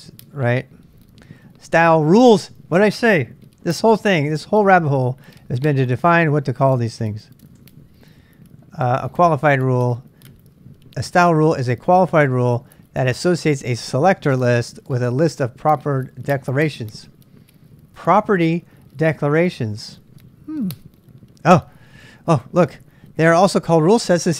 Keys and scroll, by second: 23.0-24.3 typing.